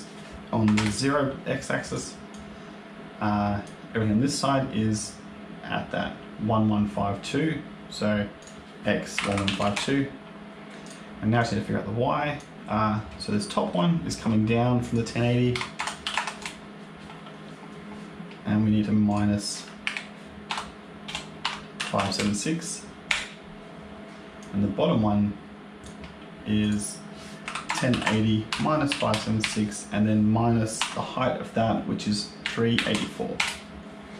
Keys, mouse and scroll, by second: 1.8 click, 2.2 click, 5.7-6.9 scroll up 4, 6.9-8.3 scroll down 3, 8.3 click, 9.2 KP_1, 10.7 click, 11.3 click, 13.2 shift+middle click, 13.8 scroll down 1, 14.7 click, 17.8-19.0 scroll down 1, 19.0 click, 24.3 click, 26.5 click.